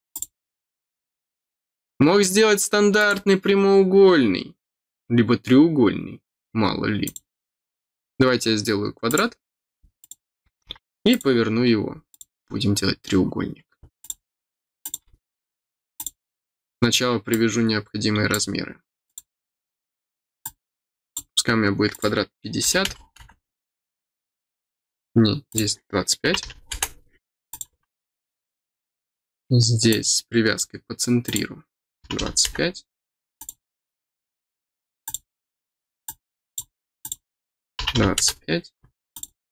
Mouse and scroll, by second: 0.1 click, 1.8 middle click, 2.9 click, 7.0 click, 7.8 middle click, 8.1 middle click, 9.0 click, 9.9 click, 11.0 click, 12.1 click, 14.0 click, 14.8 click, 15.9 click, 16.4 scroll down 2, 17.2-18.3 drag, 19.0 click, 20.4 click, 21.9 click, 25.4 click, 27.4 click, 29.8 click, 31.2 click, 33.3 click, 35.0 click, 36.0 click, 37.0 click, 39.1 click.